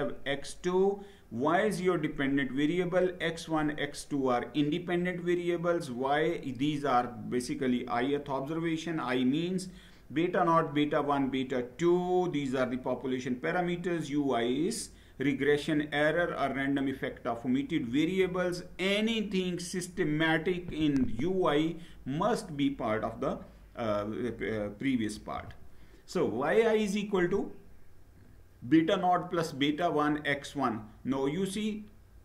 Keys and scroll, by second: 24.8 Down.